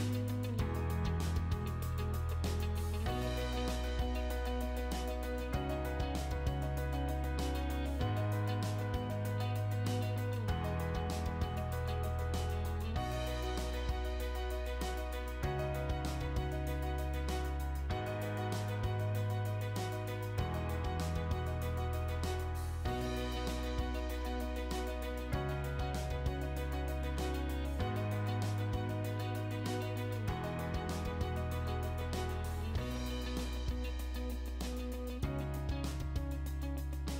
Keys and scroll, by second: 0.0-0.2 typing, 2.5 space, 4.1 b, 4.3 space, 8.4 space, 9.5-10.8 typing, 16.3 i, 16.6 space, 30.0-30.9 typing.